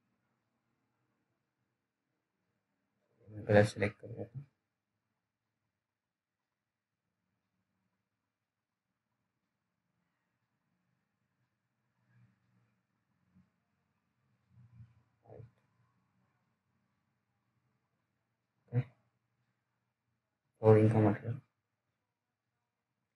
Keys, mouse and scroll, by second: 2.0 ctrl+z, 3.0 click, 3.7 ctrl+z, 6.1 click, 6.2 click, 17.6-18.0 scroll down 1, 18.2 alt+middle click, 18.3-18.6 alt+scroll down 1, 18.6-19.0 alt+scroll up 2, 19.0 click, 19.5 alt+middle click, 20.5 click.